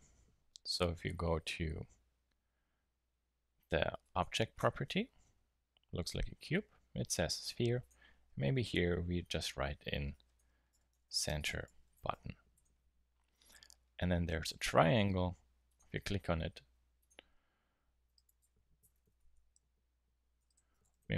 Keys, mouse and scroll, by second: 11.8 t, 15.6-18.6 drag, 18.9 BackSpace, 19.1 BackSpace.